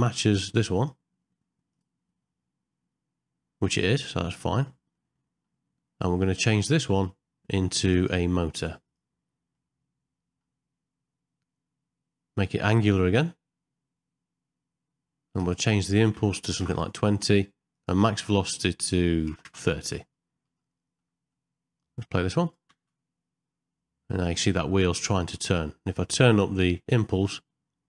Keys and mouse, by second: 0.7 click, 1.7 click, 3.6 click, 5.0 middle click, 7.8-9.0 drag, 9.5 middle click, 15.5-16.7 drag, 17.7-19.5 drag, 20.6 ctrl+middle click, 21.4 middle click, 22.7 space, 26.6-27.8 drag.